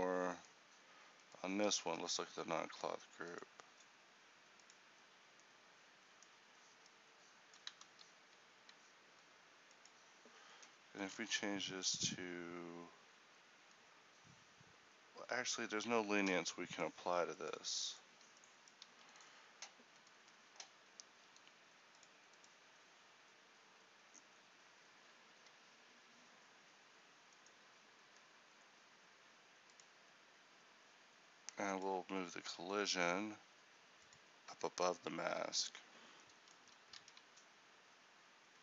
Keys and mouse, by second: 5.3-8.1 drag, 8.1 ctrl+z, 18.9 a, 22.1-36.7 drag, 36.7 a.